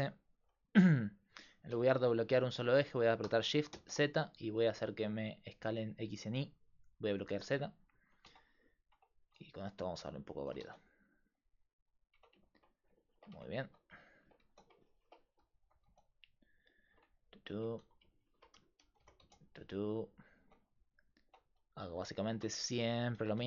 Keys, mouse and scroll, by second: 8.3 Tab, 9.0-10.4 drag, 9.9 Tab, 10.4 s, 12.2 Tab, 13.4 Tab, 13.7 a, 14.0-15.9 drag, 14.5 z, 15.7 g, 16.9 Tab, 17.6 Tab, 17.8 a, 18.2-20.3 drag, 18.2-19.2 right drag, 19.0 g, 20.5 Tab, 21.0 right click, 21.3 Tab, 21.8 a, 22.0 a, 22.3 a, 22.6 middle click, 23.2 click, 23.2 g.